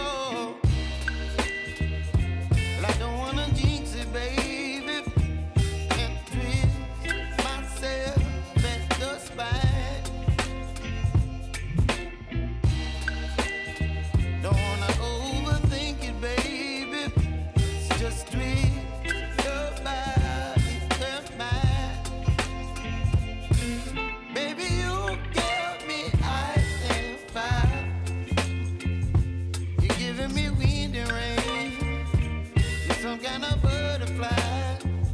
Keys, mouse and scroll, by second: 1.4 space, 1.9 click, 2.6 [, 3.8 click, 5.0 [, 5.4-10.8 drag, 11.2 u, 12.2-14.1 drag, 14.1 [, 14.9 click, 15.5 F4, 16.3-18.7 drag, 18.7 p, 19.8 click, 19.9 space, 23.1 click, 23.3 j, 24.9 v, 25.3-31.2 drag, 31.2 space, 33.5 click, 33.8 click.